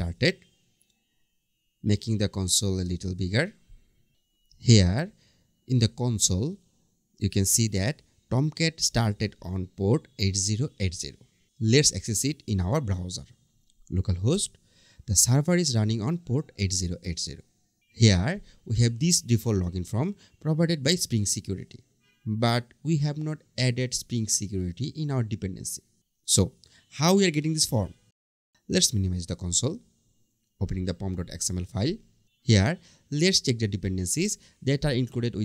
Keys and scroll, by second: 14.6 Return.